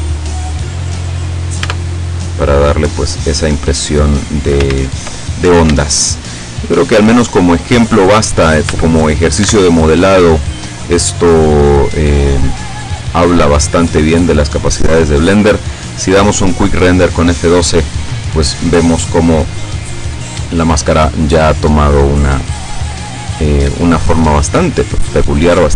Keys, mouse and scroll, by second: 1.4 click, 1.7 Tab, 2.3-4.4 middle drag, 4.8 ctrl+z, 5.5 ctrl+scroll down 3, 5.9-7.1 shift+middle drag, 7.7-8.1 scroll up 2, 8.1-8.5 scroll down 2, 8.8 Tab, 9.5 Tab, 10.4 middle click, 11.4 click, 12.6 click, 14.9 scroll up 2, 16.3 F12, 23.7 Escape, 24.2-25.7 drag.